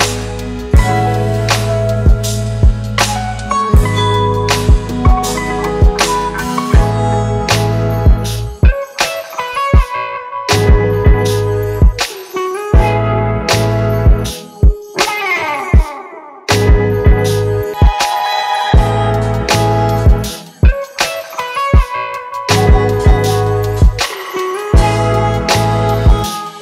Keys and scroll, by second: 10.3 ctrl+z, 19.8 ctrl+shift+i.